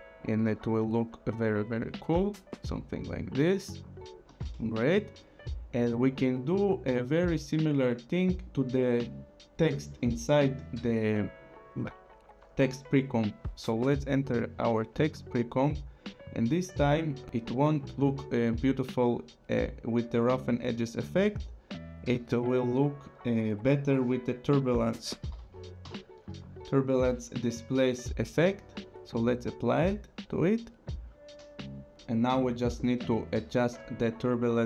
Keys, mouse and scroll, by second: 0.4 space, 4.3 space, 6.1 scroll, 7.3 click, 8.4 click, 13.6 click, 15.6 click, 16.3 scroll, 22.6 click, 25.0-26.8 typing, 28.4 click.